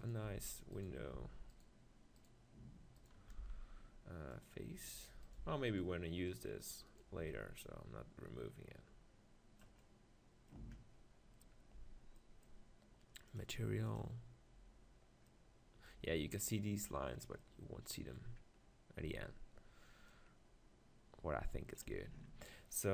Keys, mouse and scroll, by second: 0.3 Tab, 1.1 x, 3.4 x, 6.1-9.6 right drag, 6.8 x, 7.6-8.9 drag, 9.8 middle click, 11.8 Tab, 13.4 click, 17.2-20.1 middle drag, 19.1 Tab, 20.1-21.8 drag, 22.0 Tab.